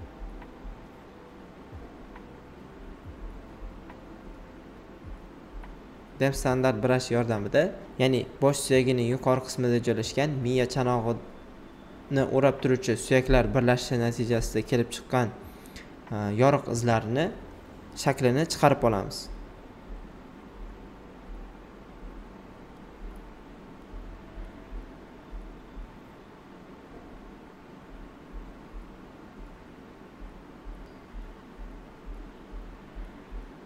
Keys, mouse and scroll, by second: 3.5 alt+right click, 5.3-8.0 alt+right drag, 8.5-12.6 alt+right drag, 13.3 click, 13.3 typing, 17.4 alt+right click, 17.5 typing, 19.7 click, 20.7 right click, 21.5 click, 23.1 shift+click, 23.1 typing, 23.7 right click, 27.1 click, 30.9 right click, 32.2 click, 33.1-33.6 shift+drag.